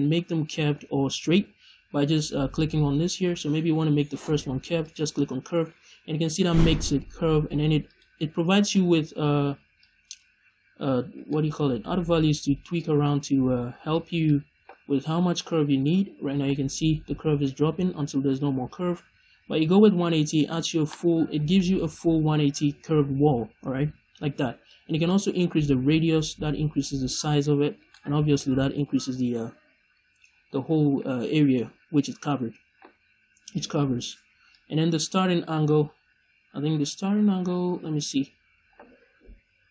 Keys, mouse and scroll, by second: 2.5-7.9 drag, 9.7-11.2 drag, 11.2 right click, 12.2-20.4 drag, 20.4 right click, 21.5-24.6 middle drag, 23.4-24.1 scroll up 2, 24.1-24.6 scroll up 1, 24.6-27.8 drag, 27.8 right click, 28.7-30.2 scroll down 1, 30.2-30.6 scroll up 1, 34.5-39.7 drag.